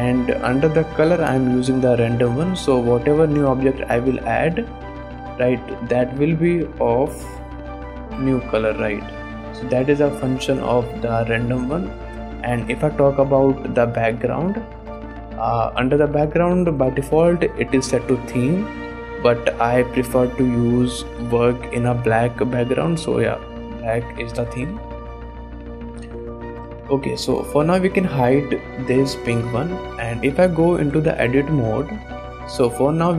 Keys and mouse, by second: 3.0 click, 3.0 middle click, 3.2 shift+drag, 4.3 shift+a, 6.3 h, 7.4 ctrl+z, 8.0 g, 8.7 click, 9.1 x, 10.0 click, 10.8-12.5 drag, 12.7 middle click, 13.0 shift+middle click, 13.8 click, 15.0-23.1 drag, 23.6 shift+middle click, 25.1 click, 25.4 shift+click, 26.5 click, 26.8 click, 27.1 shift+click, 29.2 click, 29.8 click, 31.0 Tab, 31.3 alt+a, 32.0 3, 32.6 click.